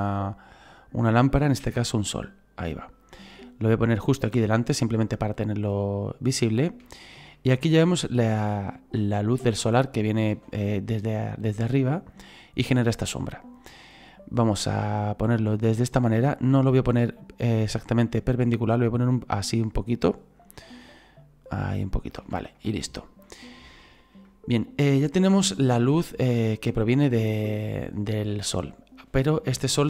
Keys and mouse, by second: 2.2 click, 3.8 click, 6.8 shift+middle click, 8.6 shift+middle click, 9.5 click, 14.7 click, 22.6 shift+middle click, 23.8 shift+middle click, 27.0 shift+middle click.